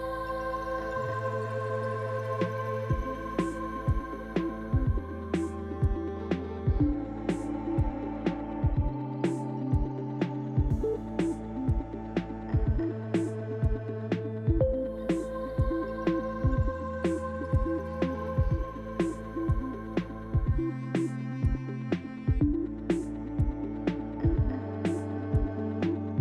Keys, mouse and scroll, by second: 0.0 shift+middle click, 1.3 scroll down 2, 2.1 shift+middle click, 7.2 click, 8.5 KP_Decimal, 10.4 Tab, 10.9 click, 11.6 shift+click, 12.0 shift+click, 12.4 click, 12.9 click, 13.3 click, 14.7 click, 15.4 click, 16.1 Tab, 16.4-16.9 scroll down 4, 17.6 shift+middle click, 18.5-18.8 scroll up 3, 19.7 click, 20.3 Tab, 20.6 click, 21.1 shift+click, 21.6 shift+click, 21.9 click, 22.4 click, 22.7 click, 24.1 click, 24.8 click, 25.3-25.8 scroll down 3, 25.7 Tab.